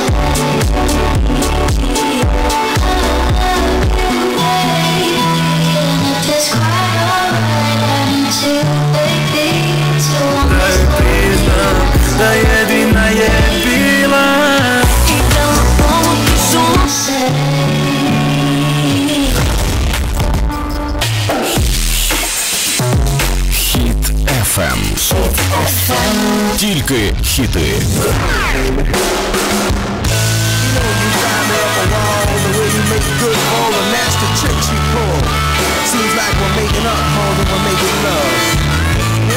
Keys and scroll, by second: 17.1 Page_Down.